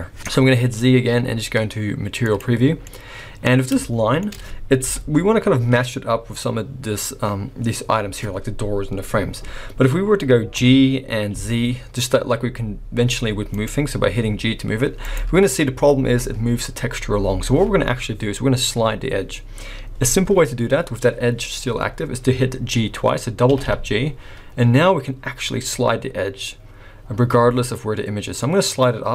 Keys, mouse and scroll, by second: 0.6 z, 2.8 middle click, 3.8 shift+middle click, 4.9 KP_1, 5.5-6.0 scroll up 3, 10.5 g, 13.9-14.3 scroll down 2, 14.3 g, 15.4-16.3 scroll up 1, 17.0 scroll up 2, 20.7-21.4 scroll down 2, 21.4-22.0 scroll down 1, 22.0-23.5 scroll down 1, 23.5 g.